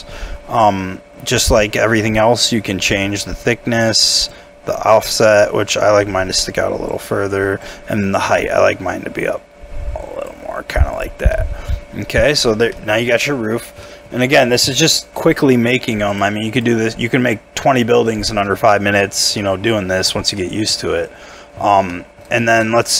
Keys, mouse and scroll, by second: 11.3 middle click, 12.3 scroll down 1, 12.7 middle click, 13.6 scroll up 1, 13.8 middle click, 15.9 Tab, 16.5 double click, 17.0 scroll down 1, 18.5-19.1 scroll up 1, 19.1 scroll down 1, 19.4 middle click, 19.8 scroll up 1, 20.0 Tab, 20.4 middle click, 20.7 scroll up 1, 21.9 middle click, 22.4 shift+middle click, 22.7 shift+middle click.